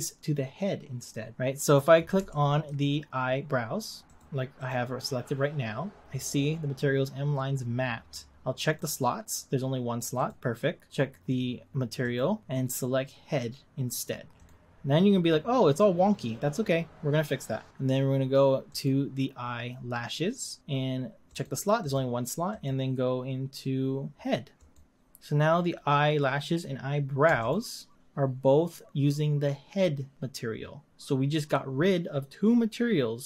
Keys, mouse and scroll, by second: 2.4-3.0 shift+middle drag, 3.0 scroll up 1, 4.2 click, 4.7 click, 8.7-12.3 drag, 18.9 click, 24.4 click, 27.5 shift+click.